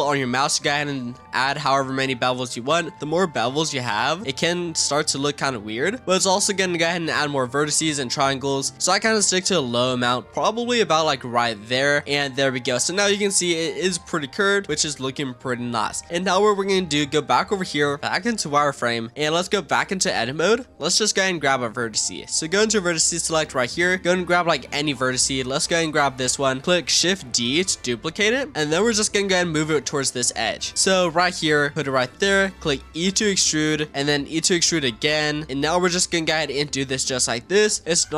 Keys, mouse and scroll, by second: 12.0 click, 12.4 Tab, 12.8-13.3 middle drag, 13.3-14.1 scroll down 5, 14.1-16.0 middle drag, 16.0 click, 16.8-17.1 scroll up 2, 17.1 z, 18.0-18.9 scroll up 2, 18.9-19.7 scroll down 2, 19.7 Tab, 23.1 click, 23.9-24.8 scroll up 3, 24.8-25.8 shift+middle drag, 25.8 click, 27.3 shift+d, 28.5-29.1 scroll up 6, 29.1-29.6 shift+middle drag, 29.6-30.0 scroll down 4, 30.7 g, 32.5 e, 34.1 e, 35.4 e, 35.7 e, 36.7 e.